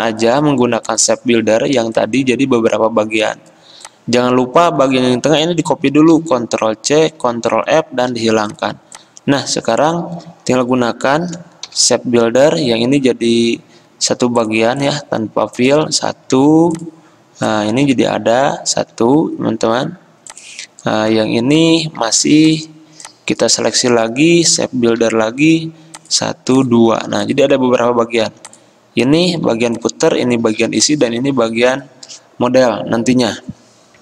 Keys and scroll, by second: 5.0 ctrl+z, 6.3 ctrl+c, 7.8 ctrl+f, 8.2 ctrl+3, 11.8 m, 14.5 m, 16.5 v, 18.1 ctrl+z, 19.8 d, 22.2 ctrl+z, 25.2 m, 27.1 c, 28.3 v, 29.6 ctrl+z, 30.6 ctrl+z, 31.5 ctrl+z.